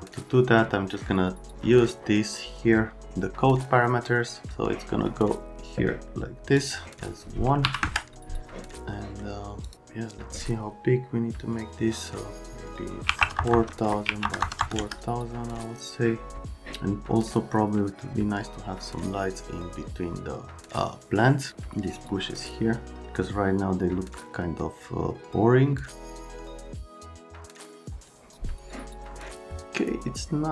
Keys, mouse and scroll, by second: 4.5 click, 6.6 click, 7.6 1, 7.8 KP_Enter, 8.9 right click, 9.6 click, 13.0-14.6 typing, 13.9 Tab, 14.7 KP_Enter.